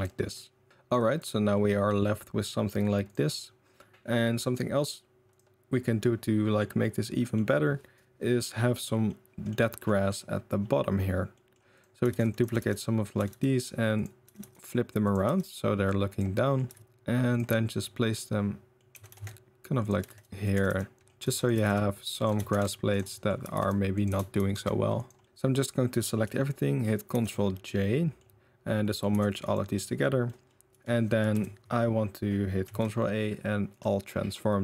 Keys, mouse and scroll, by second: 0.7 ctrl+s, 0.7 a, 1.5-3.1 middle drag, 3.1 click, 3.4-3.8 middle drag, 4.1 middle drag, 5.8-6.5 middle drag, 6.8-7.3 middle drag, 8.4 middle drag, 9.0-9.5 middle drag, 9.8 middle click, 11.3 middle click, 11.8 middle drag, 12.1 shift+d, 12.4 r, 13.1 r, 14.2 r, 15.2 r, 16.4 middle click, 16.6 r, 16.8 g, 17.5-18.7 middle drag, 18.9 g, 20.0-22.2 typing, 23.0 middle drag, 23.4 r, 24.0 g, 25.2 middle click, 25.2 ctrl+s, 25.2-25.9 middle drag, 26.2-27.6 ctrl+middle drag, 27.1 ctrl+j, 27.8-28.1 drag, 28.1 middle click, 29.1 g, 29.7 drag, 30.3 drag, 31.3 KP_1, 32.6 ctrl+a, 34.3-34.6 middle drag.